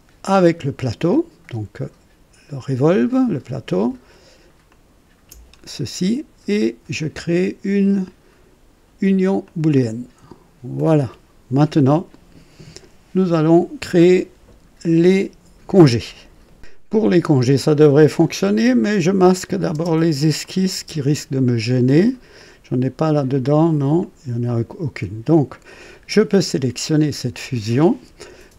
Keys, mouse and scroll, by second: 0.3 click, 4.7 ctrl+click, 9.4 click, 10.7 click, 16.4 right click, 19.3 click, 19.7 typing, 20.4 click, 20.7 typing, 22.3 click, 23.0 click, 24.0 click, 26.3 click.